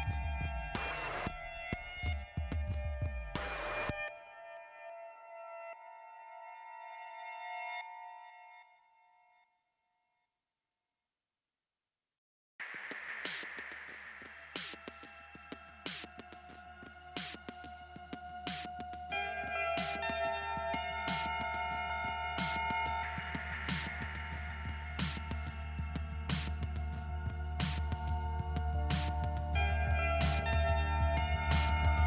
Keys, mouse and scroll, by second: 1.5 click, 2.5 click, 2.6 click, 4.3 click, 5.6 click, 5.7 click, 8.4 click, 8.5 click, 9.6 click, 12.6 t, 15.1 click, 21.1 click, 24.5 click, 24.6 click, 25.5 p, 27.3 middle click, 29.1 click, 29.2 click, 30.1 click, 30.2 click, 31.0 right click, 31.8 click.